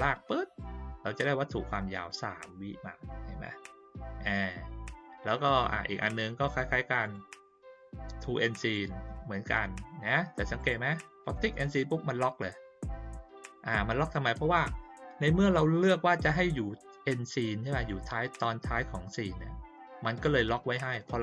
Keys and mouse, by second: 0.1 click, 2.0 click, 5.3 click, 7.0 click, 8.6 click, 10.5 click, 11.2 click.